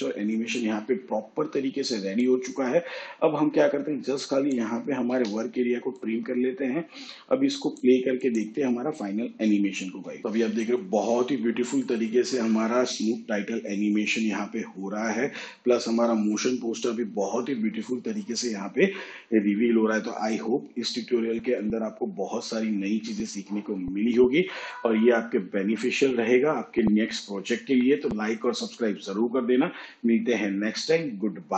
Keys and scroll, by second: 5.1 n, 9.9 space.